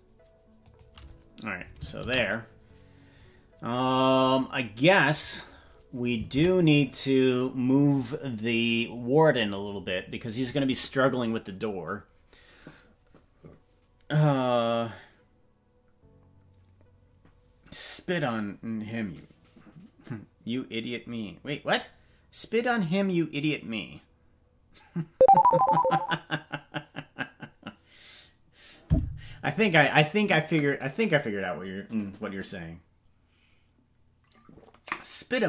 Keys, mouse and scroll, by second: 4.3 ctrl+s, 5.3 right click, 6.4 ctrl+Tab, 6.8-10.3 right drag.